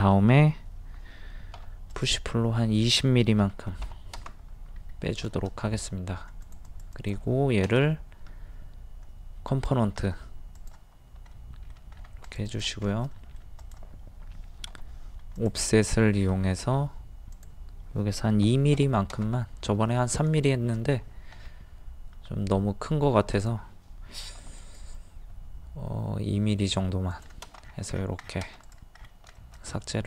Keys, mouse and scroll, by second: 1.5 p, 1.9 click, 3.4 KP_2, 4.7 scroll down 1, 5.3 shift+middle click, 5.9-6.3 scroll up 1, 6.4 click, 7.7 right click, 9.5 click, 11.3 middle click, 12.0-12.3 scroll up 1, 12.3 click, 12.9 shift+middle click, 13.6 click, 14.7 o, 15.4 click, 16.6 ctrl+z, 17.4 click, 18.5 KP_2, 19.5-20.2 scroll up 1, 20.4 shift+middle click, 21.0-21.3 scroll up 1, 23.3 click, 24.4 p, 24.6 click, 27.6-27.9 scroll down 1, 28.8 click, 29.0 scroll down 1, 29.4 shift+middle click.